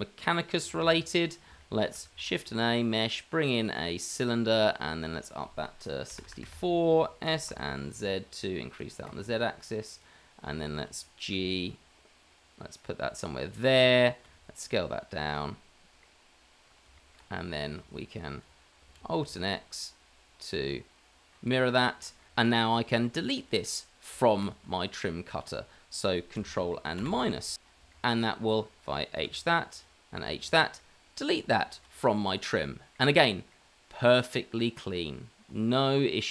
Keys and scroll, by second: 0.6 h, 1.8 h, 2.4 h, 2.4 shift+a, 7.2 s, 11.3 g, 14.2 s, 17.2 s, 19.1 alt+x, 27.5 KP_Subtract, 28.2 KP_Subtract, 29.2 h, 30.1 h, 31.8 h.